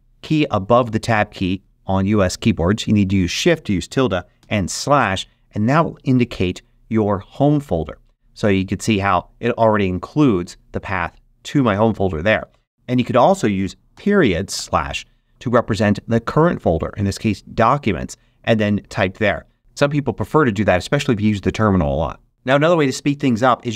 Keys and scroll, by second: 4.3 /, 12.7 BackSpace, 13.9-14.5 typing.